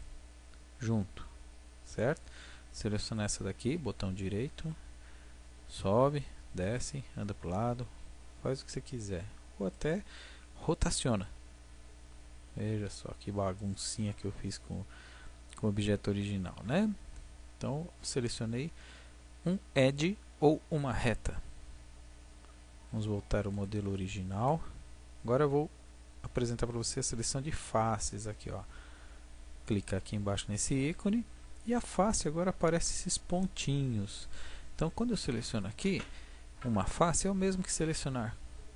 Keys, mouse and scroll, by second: 0.0-1.7 middle drag, 1.7 click, 3.0-5.3 drag, 4.5 g, 9.8-11.8 drag, 11.1 r, 13.7-15.6 drag, 22.9 ctrl+z, 23.1 ctrl+z, 29.7-31.5 drag, 31.9-33.8 middle drag, 33.8 click, 35.6-37.5 right drag, 37.5-38.5 drag.